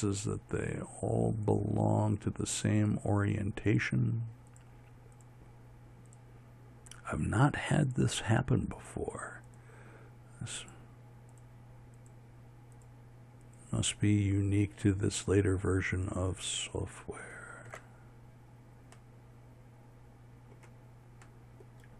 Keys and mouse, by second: 20.1-21.8 middle drag.